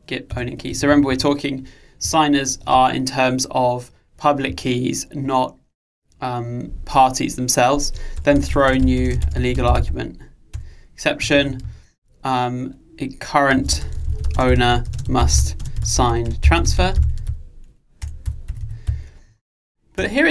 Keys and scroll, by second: 10.7 Return.